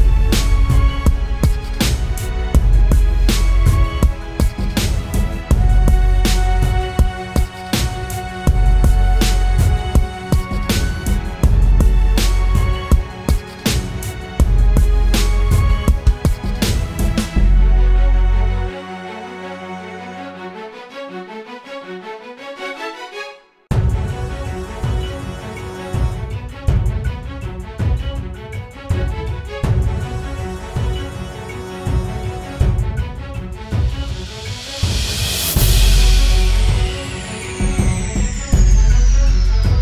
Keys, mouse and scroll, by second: 10.0 double click, 11.1-12.1 typing, 27.2-29.9 scroll down 1.